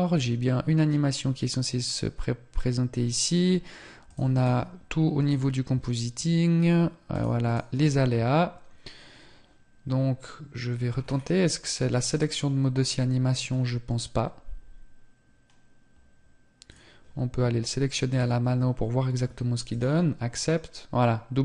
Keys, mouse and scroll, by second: 6.2 click, 10.0 scroll down 2, 11.2 click, 11.2 scroll down 5, 18.8 click.